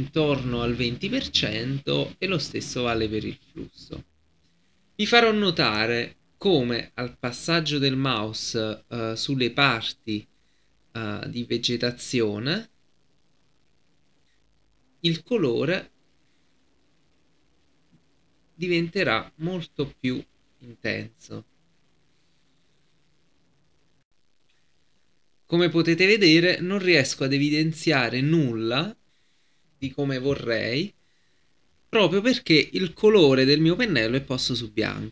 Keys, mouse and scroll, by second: 5.7 right click, 6.6-21.7 drag, 24.0 F10, 25.0-35.1 drag.